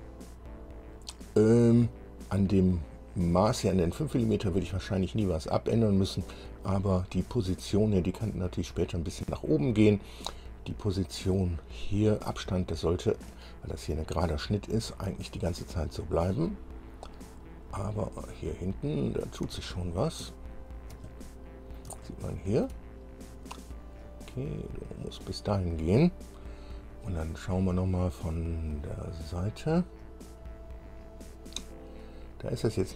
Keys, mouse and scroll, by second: 0.2 scroll up 2, 14.8-15.5 scroll down 4, 16.3-16.7 scroll up 2, 17.2-17.7 scroll up 2, 18.5-19.5 drag, 20.0 shift+scroll down 2, 20.5-22.1 shift+drag, 22.2 shift+click, 24.0-25.5 drag, 28.5 click, 29.7-30.4 scroll up 2, 31.1-31.5 scroll up 2, 32.5-32.9 drag.